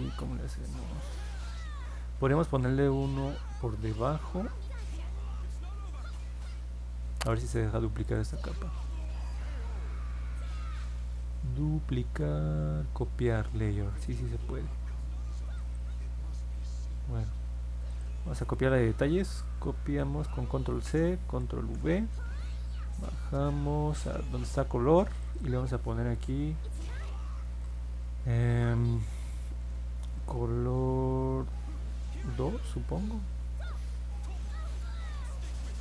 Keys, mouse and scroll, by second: 8.0 right click, 15.5 click, 17.8 click, 19.4 ctrl+c, 21.2 ctrl+v, 22.1-24.0 drag, 25.1 click, 25.3 click, 29.4-32.2 typing.